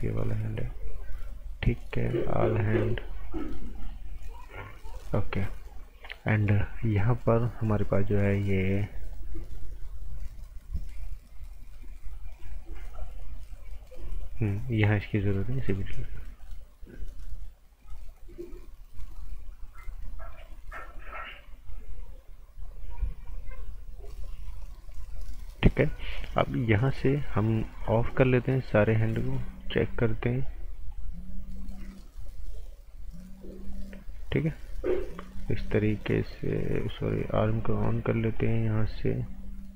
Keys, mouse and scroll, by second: 12.1 click, 26.9 click, 29.6 click, 33.6 click.